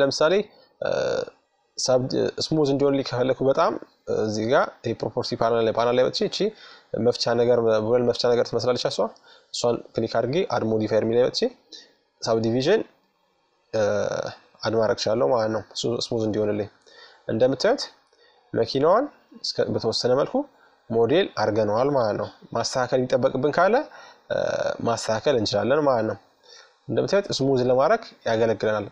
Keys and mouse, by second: 1.3-4.7 drag, 5.0-6.8 drag, 8.7-10.4 drag, 12.8-14.8 drag, 13.9 middle click, 14.6 middle click, 21.0-22.6 drag, 23.4-26.0 drag, 26.1-28.9 middle drag.